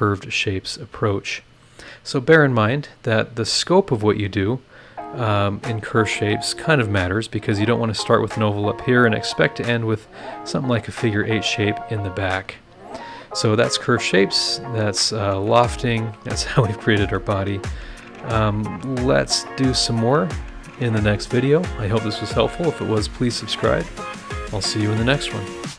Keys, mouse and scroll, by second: 0.6 click, 1.1-3.3 middle drag, 1.2-3.3 drag, 1.2-3.3 right drag, 12.9 click, 13.6-14.1 scroll down 2, 14.4-15.6 middle drag, 15.9-17.4 middle drag, 15.9-17.4 drag, 17.6-19.1 middle drag, 19.4 scroll up 1, 19.9 middle click, 20.4 scroll down 1, 21.2 click.